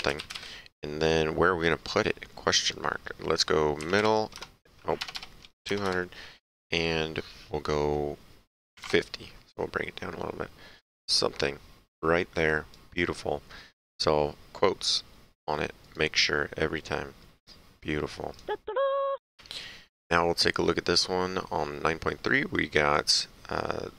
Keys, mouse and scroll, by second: 0.0-0.8 typing, 2.7 click, 3.8 KP_2, 4.3 KP_0, 5.0 BackSpace, 5.7 KP_0, 6.5 Tab, 8.7 KP_5, 8.8 KP_0, 10.8 click, 12.5 click, 15.8 click, 18.3 click, 19.2 ctrl+Page_Down.